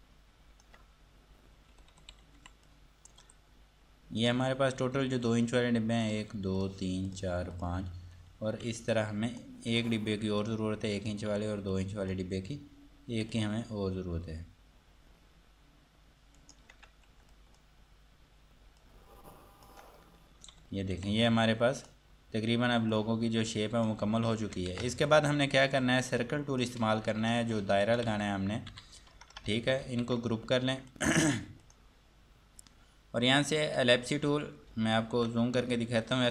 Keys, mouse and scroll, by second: 1.4 scroll down 1, 1.9 F3, 2.9 click, 3.4 Escape, 4.4 click, 8.9 F2, 9.1 click, 9.9 Escape, 10.6 click, 11.5 F2, 11.9 click, 13.1 scroll down 1, 13.5 click, 16.6 ctrl+right click, 17.3 F2, 17.5 click, 20.3 scroll down 1, 20.7 F3, 21.2 F2, 21.5 click, 26.0 click, 27.7 click, 28.3-29.4 typing, 31.1 click, 34.9 ctrl+Num_Lock, 35.2 ctrl+4.